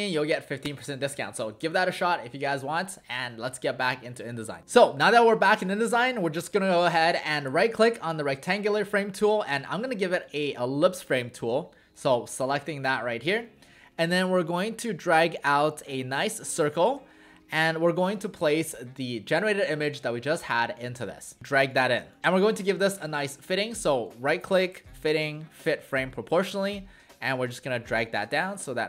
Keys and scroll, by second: 16.9 v, 22.2 ctrl+z.